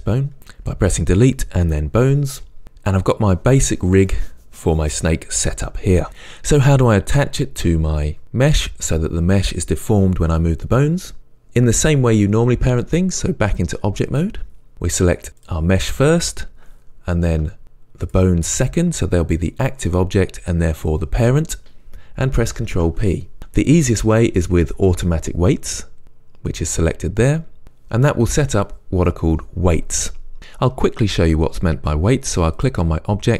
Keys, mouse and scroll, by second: 1.4 Delete, 13.5-15.5 drag, 18.1 shift+click, 22.6 ctrl+p, 32.6 click.